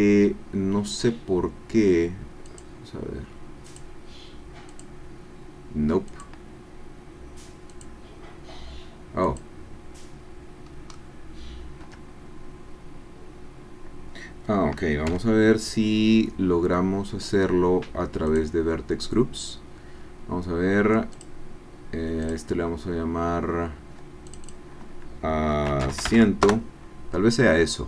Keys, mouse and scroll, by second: 2.5 click, 3.7 click, 4.8 click, 6.1 click, 7.7 click, 9.2 click, 10.7 scroll down 1, 10.9 click, 11.8 Tab, 12.2-14.4 middle drag, 15.2 1, 18.3 click, 22.3 click, 24.4 click, 25.5-26.1 typing, 26.5 Return.